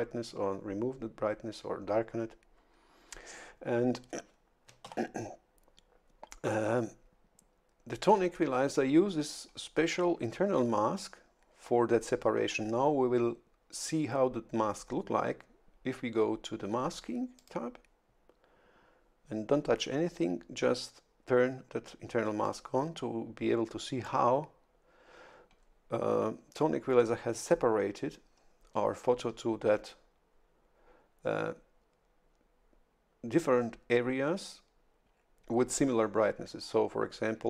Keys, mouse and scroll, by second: 4.8 shift+F11, 17.4 click, 22.4 click.